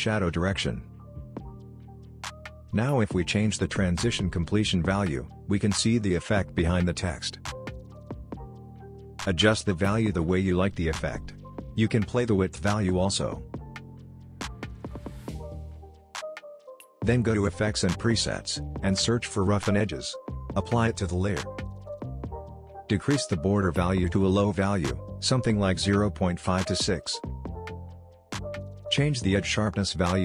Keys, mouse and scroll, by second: 3.3-7.0 drag, 7.2-7.9 scroll down 1, 7.9-9.6 scroll up 1, 9.6-11.4 scroll down 1, 11.9-14.4 drag, 14.5-15.1 scroll down 1, 15.1-16.9 scroll up 1, 17.0 click, 18.6-20.1 typing, 20.8-26.4 drag.